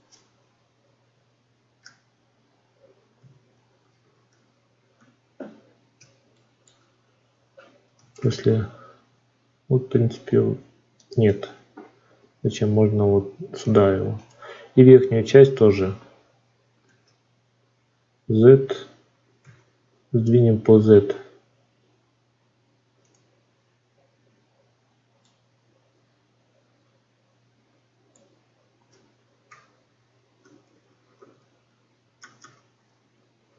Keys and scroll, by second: 16.7 shift+d.